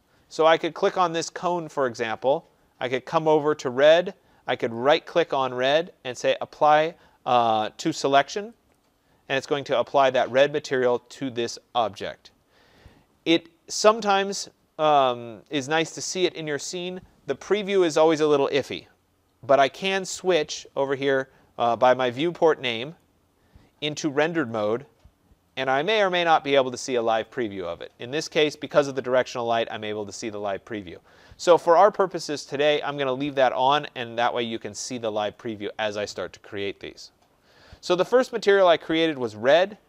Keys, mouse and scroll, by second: 0.6 click, 4.8 right click, 8.7 click, 12.8 click, 22.9 click, 24.6 click, 29.7 click, 31.5-36.6 drag.